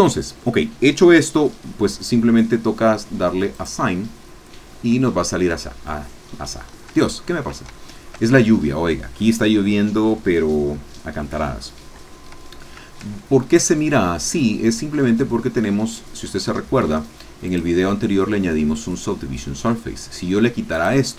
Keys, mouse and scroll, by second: 3.6 click, 4.8 scroll down 3, 5.2 shift+middle click, 6.6-6.9 scroll up 1, 7.1 shift+middle click, 7.8 shift+middle click, 13.1 ctrl+scroll down 2, 17.5 click, 20.7 click.